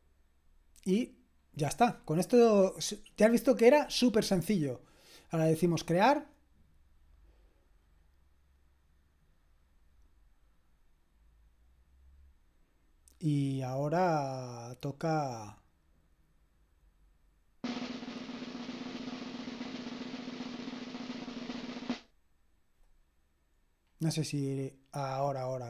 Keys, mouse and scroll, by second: 0.6-5.1 scroll down 1, 5.1-6.2 drag, 15.2 click.